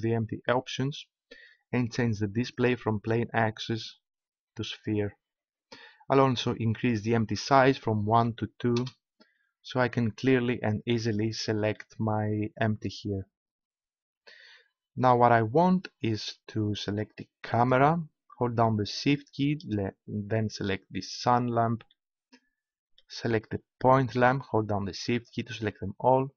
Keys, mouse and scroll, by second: 3.6-4.9 middle drag, 6.7-8.9 middle drag, 9.7-14.3 middle drag, 17.6-20.9 right drag, 21.3-22.4 right drag.